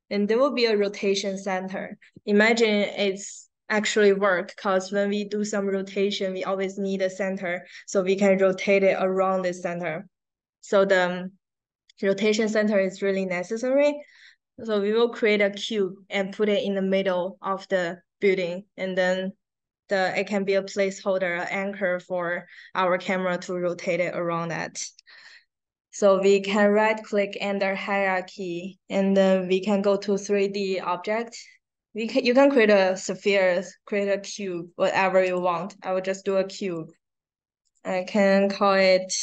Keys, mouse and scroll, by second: 14.6 right click, 26.0 right click, 35.2 click, 36.6 click, 37.6 click, 39.0-39.2 typing.